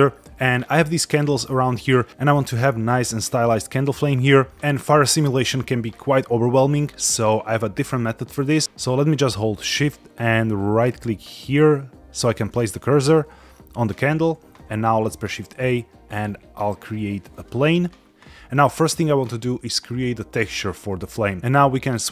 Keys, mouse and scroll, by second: 0.6-1.2 middle drag, 1.5 scroll up 2, 8.6 shift+s, 12.0 shift+right click, 12.7 middle drag, 13.3-13.8 shift+middle drag, 14.9 shift+a, 21.4 KP_Divide.